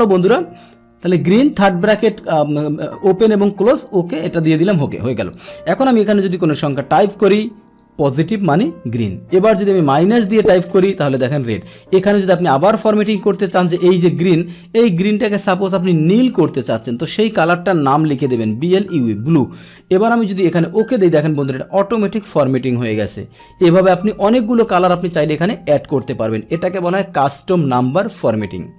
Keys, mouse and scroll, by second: 4.7 click, 5.3 click, 6.9 Down, 12.1 click, 13.0 ctrl+1, 13.0 click, 16.2-17.2 drag, 20.5 click, 21.3 click, 22.2 click.